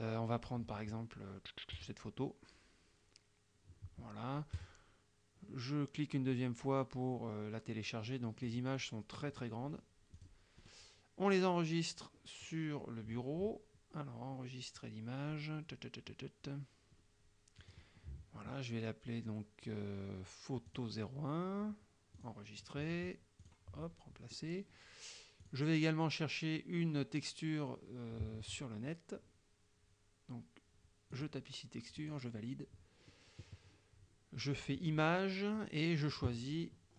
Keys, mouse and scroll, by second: 1.8 click, 4.6 click, 8.5 click, 9.3-9.7 scroll down 2, 9.8 scroll up 2, 10.2 click, 10.7 right click, 17.7 scroll up 1, 20.8 click, 22.2 click, 23.5 click, 25.5 click, 31.2 click, 32.1 click, 34.8 click, 35.3-36.1 scroll down 1, 36.1-36.5 scroll down 1.